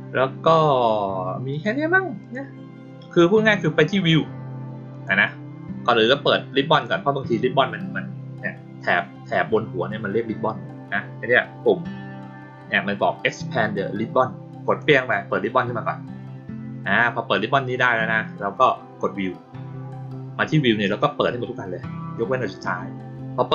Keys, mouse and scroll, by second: 1.5 click, 2.2 click, 4.9 click, 6.6 click, 14.6 click.